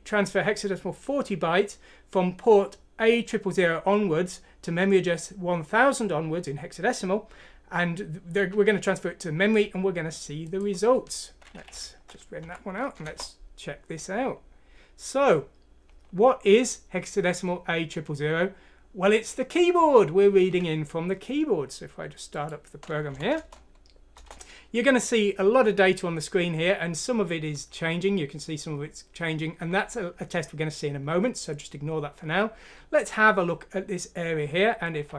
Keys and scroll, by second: 12.4 F6, 12.4 typing, 13.0 Return, 23.3 Return, 24.1 Return.